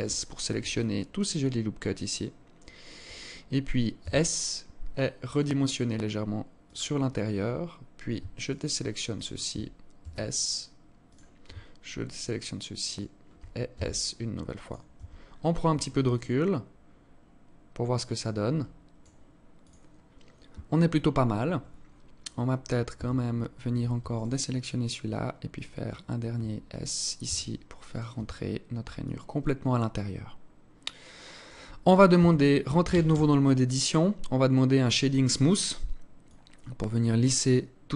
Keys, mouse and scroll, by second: 0.0 scroll down 3, 0.3 alt+click, 3.4 s, 6.3-7.1 scroll up 6, 7.7 scroll up 1, 7.8 alt+shift+right click, 9.4 s, 11.6 alt+shift+right click, 13.1 s, 14.3 Tab, 14.6-15.6 scroll down 10, 15.4 alt+click, 21.4-22.5 scroll up 10, 22.6 Tab, 23.8 alt+shift+right click, 26.8 s, 28.0 Tab, 28.0-28.3 scroll down 7, 28.6 alt+click, 31.8 Tab, 32.5 a, 32.7 a, 35.8 click.